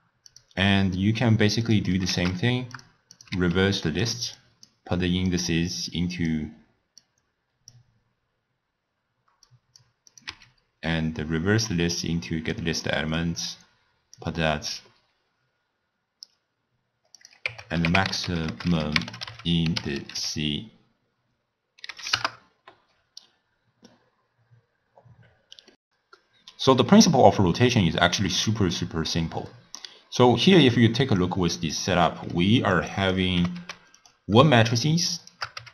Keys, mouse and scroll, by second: 1.7 click, 2.4 shift+d, 3.2 click, 3.6 shift+d, 4.4 click, 5.3-7.1 drag, 9.5 click, 10.1 click, 10.6 x, 10.9 drag, 12.0 click, 13.2-16.8 drag, 17.2-20.2 drag, 28.8-31.2 middle drag, 31.2 click, 32.1 middle click, 32.8 click, 33.4 g, 34.4 scroll down 1, 34.4-35.1 middle drag, 35.1 shift+right click, 35.6 g.